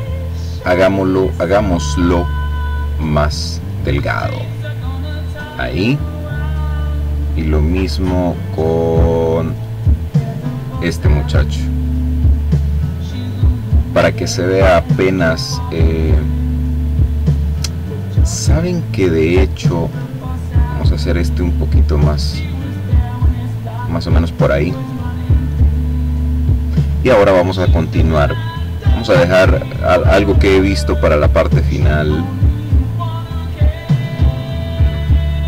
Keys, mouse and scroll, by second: 0.3 click, 1.7-2.7 scroll down 1, 2.9-3.9 scroll down 1, 6.2 click, 7.3 click, 8.6 click, 9.6 click, 10.9-11.7 scroll down 2, 11.8-13.0 scroll down 2, 13.5-14.0 ctrl+scroll down 2, 15.8-16.8 ctrl+scroll up 2, 17.6-18.2 ctrl+scroll down 2, 18.2-19.8 ctrl+drag, 20.7-21.2 scroll up 2, 27.7 click, 30.1 click, 31.0-32.6 drag, 33.2 click.